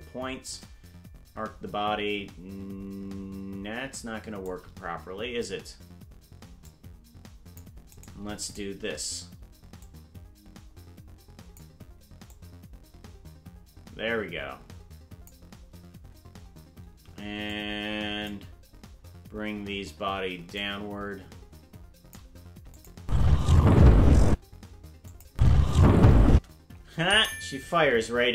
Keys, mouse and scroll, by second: 0.4-4.5 shift+drag, 6.6-7.6 drag, 8.0 right click, 8.5 shift+right click, 9.8-11.6 drag, 12.3-15.3 drag, 17.5 click, 20.6-22.2 drag, 22.8 click, 23.0 space, 24.3 space, 25.1 click, 25.3 space, 26.3 space, 28.2 KP_0.